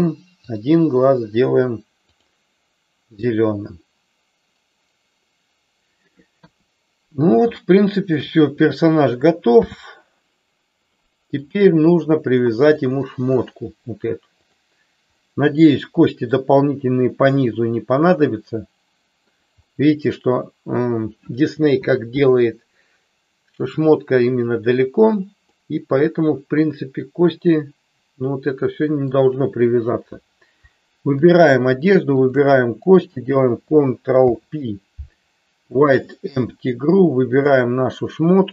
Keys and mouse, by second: 0.4 click, 2.2 click, 6.4 KP_1, 7.6 shift+middle click, 9.5 n, 10.9 middle click, 12.9 click, 14.5 click, 15.1-16.4 middle drag, 17.4-19.4 middle drag, 25.5-29.3 middle drag, 32.3 shift+click, 34.2 ctrl+p, 37.4 click.